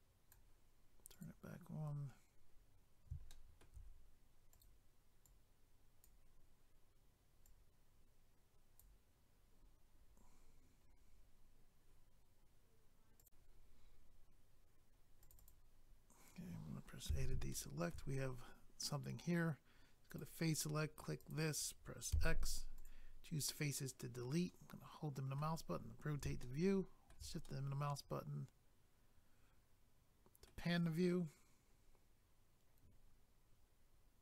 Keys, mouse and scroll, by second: 1.1 click, 1.2 click, 1.8-2.5 scroll down 1, 2.5 scroll up 1, 3.3 shift+middle click, 4.5 click, 4.6 click, 5.2 click, 9.6 scroll down 1, 13.2 click, 13.3 click, 15.2 click, 15.3 click, 15.4 click, 15.5 double click, 15.8 scroll up 1, 17.1 a, 17.5 shift+middle click, 18.1-19.4 scroll up 1, 20.1 click, 20.2 click, 21.2 click, 21.3 click, 22.1 x, 22.7 click, 22.8 click, 23.4 scroll down 1, 24.5 middle click, 26.4 shift+middle click, 27.4 middle click.